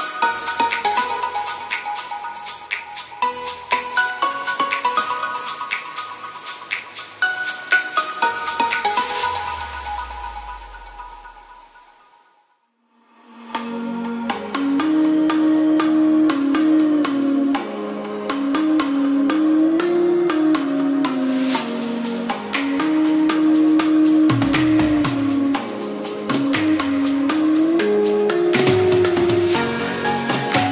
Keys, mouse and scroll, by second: 15.2 shift+a, 16.4-17.4 typing, 20.1 g, 20.3 y, 22.2 s, 27.8 s.